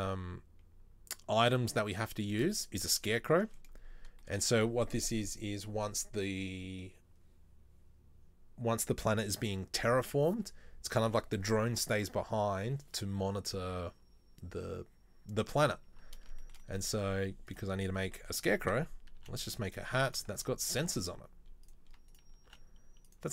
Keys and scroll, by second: 19.3 e, 20.5 ctrl+z, 22.6 e.